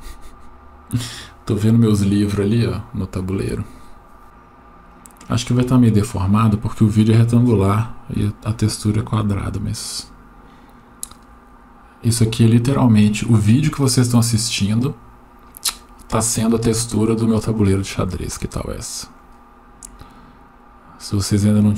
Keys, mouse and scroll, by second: 0.4-1.2 middle drag, 2.4-3.2 middle drag, 4.2 middle click, 5.6-6.6 middle drag, 17.6-19.1 middle drag.